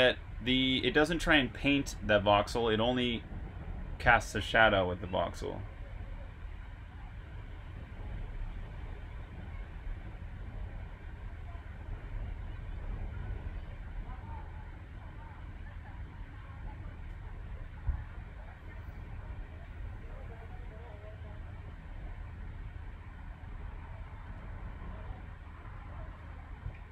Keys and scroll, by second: 1.3 typing.